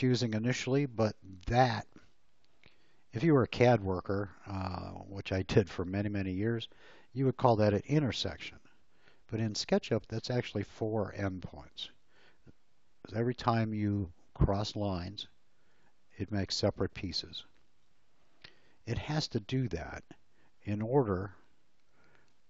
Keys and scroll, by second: 19.6 space, 22.2 l.